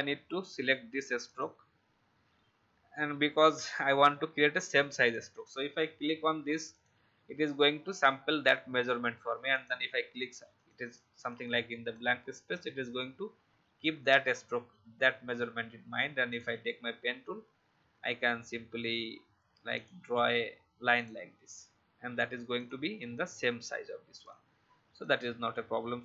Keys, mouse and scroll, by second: 20.9 shift+click, 21.9 shift+v, 22.5-25.7 drag.